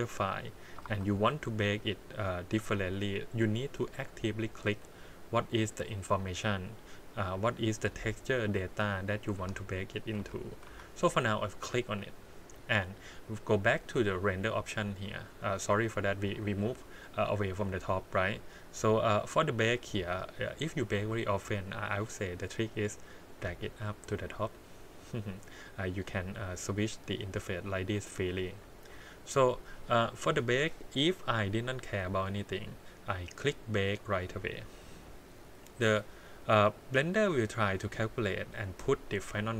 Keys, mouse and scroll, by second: 0.9 shift+d, 3.5 click, 4.1 click, 4.7 click, 5.3 click, 7.9 click, 9.1 click, 9.4 x, 9.9 click, 10.2 x, 10.6 x, 11.6 click, 14.1 click, 15.8 scroll down 4, 16.3-17.2 scroll up 4, 17.2 scroll up 1, 17.3 click, 18.6 scroll down 3, 20.0-20.4 scroll up 4, 22.3-24.1 drag, 25.0-25.3 scroll up 2, 26.8 click, 27.6-28.9 drag, 29.6 click, 30.7-32.7 scroll down 2, 34.0 click.